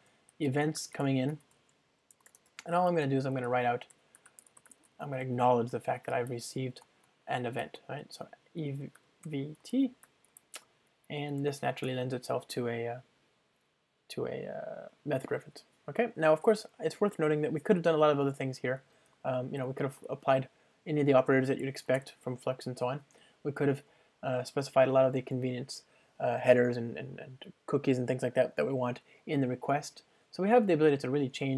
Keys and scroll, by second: 1.7 super+p, 6.9 Return, 11.4 alt+Return, 19.3 super+BackSpace, 22.0 ctrl+space.